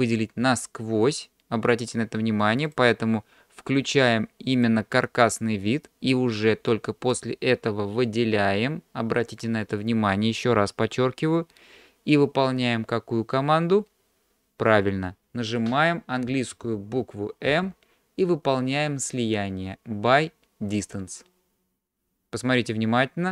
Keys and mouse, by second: 4.6 click, 6.0-7.1 drag, 17.5 m.